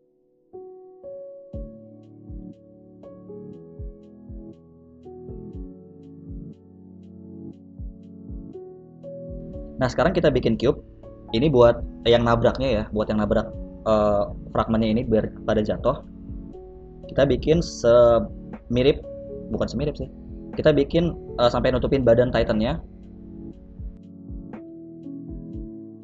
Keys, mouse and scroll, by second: 0.4 click, 4.6 ctrl+s, 5.0 middle click, 5.3 a, 5.4 a, 7.6 click, 8.7 click, 9.4 shift+a, 12.7 shift+right click, 13.4 shift+s, 15.0 right click, 15.7 KP_3, 15.9 z, 18.1 Left, 18.5 Left, 19.8 g, 21.5 g, 22.5 Tab, 22.7 s, 24.5 s, 25.6 Tab, 25.7 g.